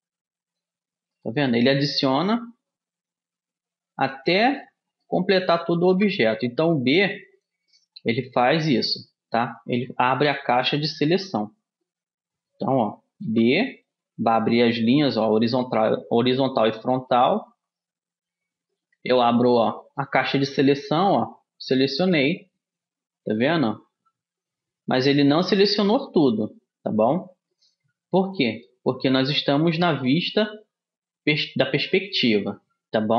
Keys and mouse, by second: 2.3 b, 6.1 b, 9.1-13.3 middle drag, 10.3 a, 13.3 b, 23.0-33.1 middle drag.